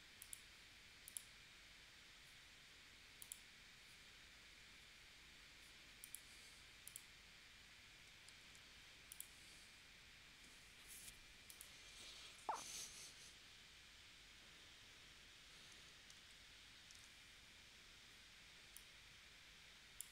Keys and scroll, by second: 8.4 super+z, 16.8 shift+w.